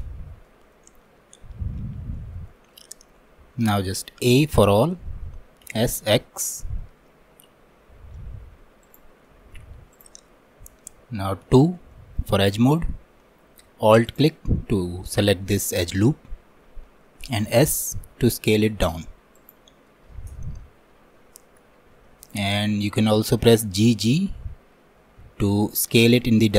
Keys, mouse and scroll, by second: 0.5 alt+middle click, 1.2 scroll up 1, 2.2-4.3 shift+middle drag, 4.3 a, 9.3 middle click, 10.0 click, 10.9-11.2 scroll up 1, 11.5 2, 12.0-14.1 shift+middle drag, 14.1-17.2 alt+drag, 19.9-23.0 middle drag, 23.1 middle click, 23.9 g.